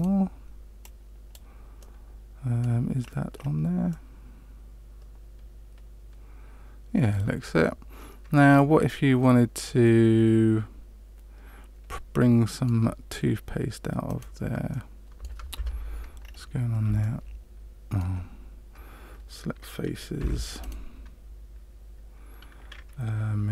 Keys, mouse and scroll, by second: 0.8 click, 1.8 middle click, 3.3-3.9 scroll up 2, 3.9 middle click, 14.0 right click, 14.7 middle click, 15.5 Tab, 16.2 scroll up 3, 17.0 shift+middle click, 20.1 3, 20.6 right click.